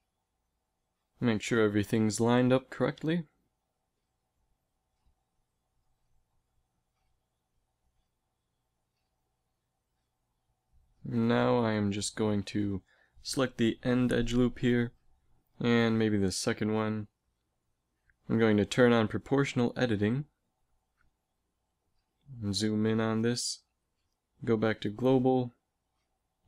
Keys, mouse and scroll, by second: 1.2 z, 3.6 g, 7.6 z, 11.4 Tab, 12.0 z, 12.7 b, 15.8 b, 17.6 p, 18.4 o, 19.1 z, 21.0 KP_Decimal, 23.6 alt+space, 26.3 g.